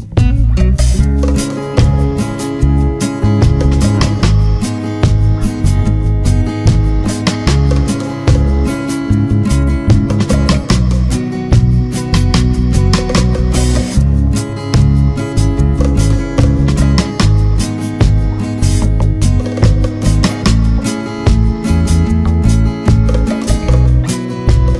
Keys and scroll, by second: 17.3 ctrl+z.